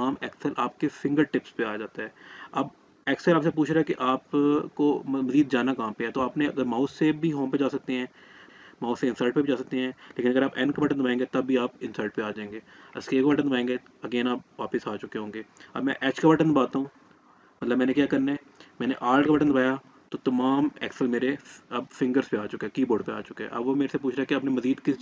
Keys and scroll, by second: 10.1 n, 13.0 Escape.